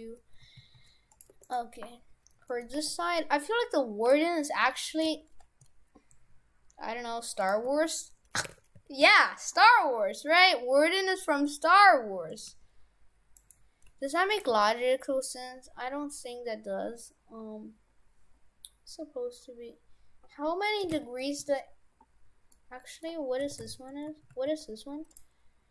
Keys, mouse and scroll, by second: 1.3 Tab, 1.5 right click, 2.5 middle click, 2.8 a, 3.2 middle click, 4.1 g, 5.1 g, 7.7 r, 9.7 g, 12.5 g, 13.9 g, 14.5 r, 22.6 middle click, 23.5 shift+f.